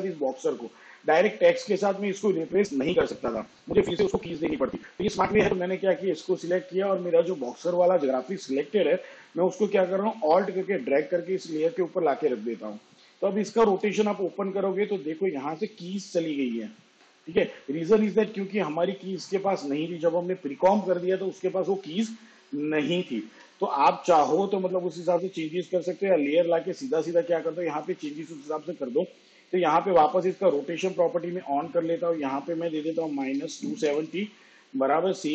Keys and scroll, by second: 13.9 r, 23.3 s, 30.1 r, 33.0 2, 34.1 0.